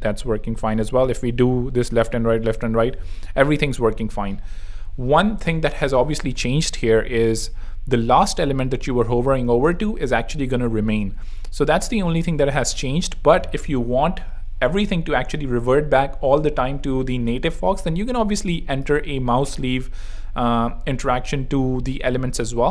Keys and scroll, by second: 17.5 super+2, 22.6 super+3.